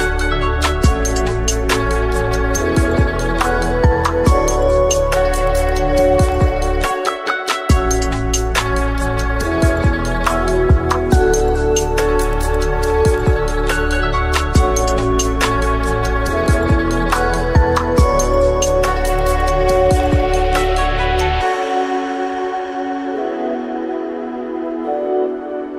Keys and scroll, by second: 0.5 ctrl+z, 2.4 Tab, 3.0 Return, 3.0 typing, 9.9 Tab, 12.2 ctrl+z, 13.0 Tab, 13.2 Tab, 17.1 2, 17.3 Return, 24.5 ctrl+x.